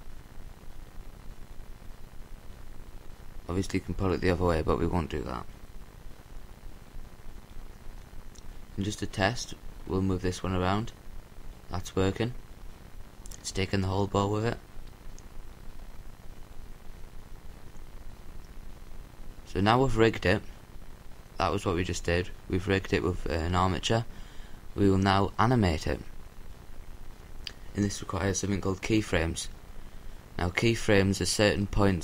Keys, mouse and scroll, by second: 5.7-8.7 right drag, 14.4-19.2 drag, 21.3 a, 24.3-25.5 right drag.